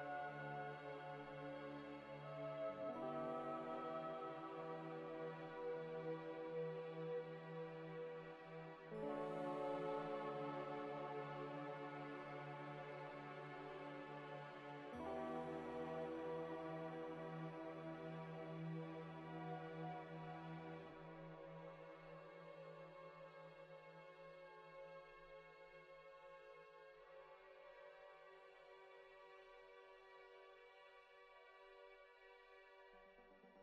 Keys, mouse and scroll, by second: 1.2 double click, 2.0 alt+Tab, 8.3 Tab, 8.6 a, 9.7 u, 11.6 s, 12.4-12.7 scroll down 1, 12.7 scroll up 1, 15.4 s, 16.2 a, 16.2 scroll down 1, 16.5 s, 17.3 g, 18.0 Tab, 20.5 scroll down 1, 20.6 scroll up 1, 23.5 middle click, 25.1 Delete, 26.0 ctrl+z, 27.0 ctrl+z, 27.2 ctrl+z, 27.5 ctrl+z, 29.0-29.3 scroll down 1, 30.0 scroll up 1, 30.3-30.7 scroll down 1, 31.2-32.0 scroll up 1, 33.4 z.